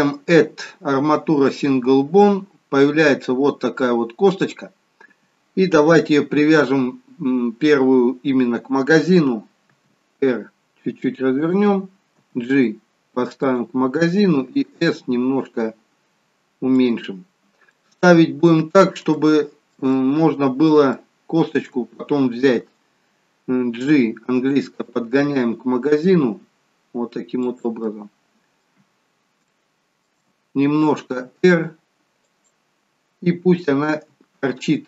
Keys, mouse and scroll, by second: 3.0-3.6 scroll up 1, 3.6-6.1 scroll down 1, 12.1 g, 14.4 s, 17.6 middle click, 19.1 shift+middle click, 19.9 middle click, 20.8 shift+middle click, 23.8 g, 27.8 middle click, 29.4 shift+middle click, 31.0 r, 33.8 g.